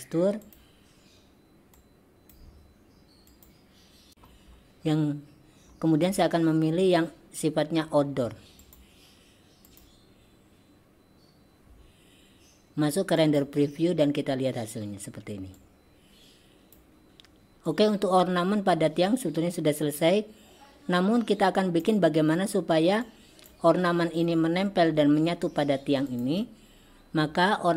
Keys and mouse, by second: 1.9 click, 3.4 click, 14.1 drag, 15.7-16.8 drag, 17.7-21.9 drag, 23.1 click, 26.1 click.